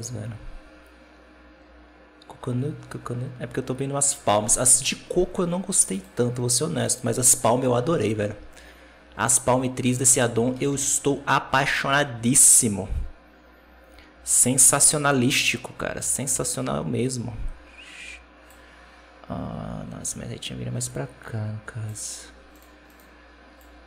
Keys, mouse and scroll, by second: 6.7-9.1 drag, 9.1-10.4 right drag, 10.4 r, 12.4-15.4 drag, 19.9-22.5 drag, 22.8 right click, 23.5 click.